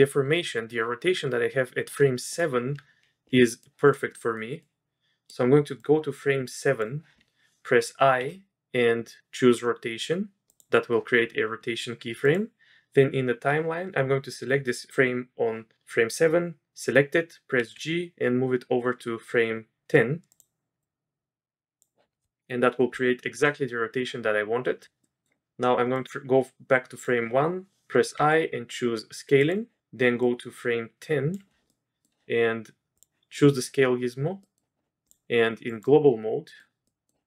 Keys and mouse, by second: 3.7 middle click, 4.3 middle click, 4.6-5.3 middle drag, 5.8 click, 8.2 i, 12.2 click, 17.6 g, 20.8-21.8 drag, 25.0 drag, 25.9-27.0 drag, 28.1 i, 30.2-31.3 drag, 31.7-32.0 middle drag, 33.0 click, 33.3 middle click, 34.4 middle click, 35.1-36.1 drag, 36.4 click, 36.8 click.